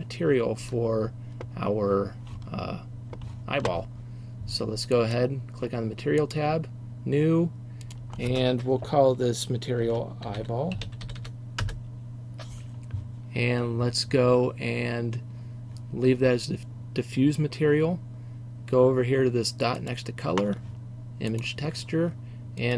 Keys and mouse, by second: 0.7 Tab, 6.4-11.7 drag, 11.7 l, 20.7-22.7 drag.